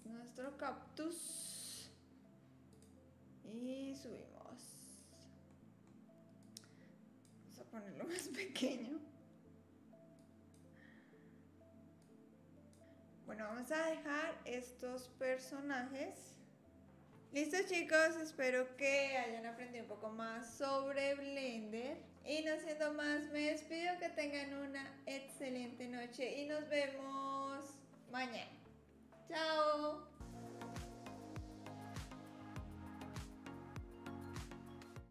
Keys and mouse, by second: 2.7 click, 3.7-5.0 drag, 5.5 middle click, 6.5 click, 8.2 s, 12.1 click, 12.8 KP_3, 13.6 click, 24.7 click, 25.2 click, 25.7-26.6 middle drag.